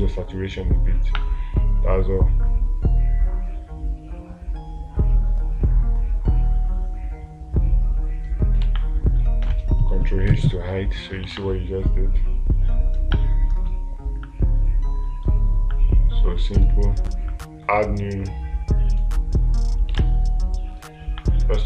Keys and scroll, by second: 9.1 space, 11.8 space, 20.4 space.